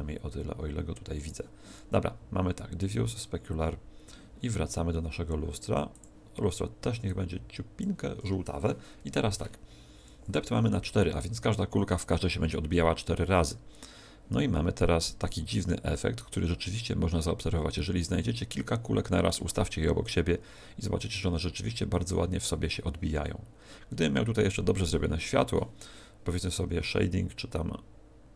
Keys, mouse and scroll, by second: 3.0 click, 4.4 scroll up 2, 5.0-5.9 scroll up 3, 5.9 click.